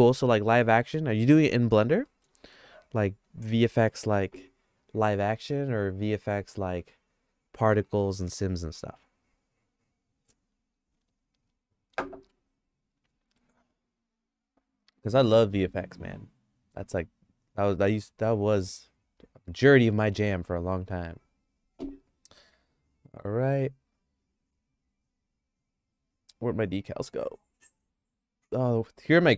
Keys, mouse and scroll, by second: 2.0 middle click, 2.5-3.9 shift+middle drag, 15.8 click, 19.6-21.2 drag, 24.2 click, 27.6 click, 29.2 middle click.